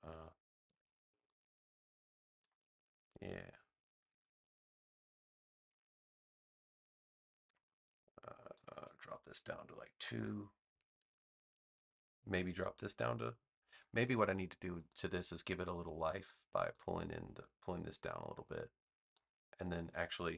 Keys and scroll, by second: 0.6 a, 4.0 v, 9.9 2, 10.1 Return.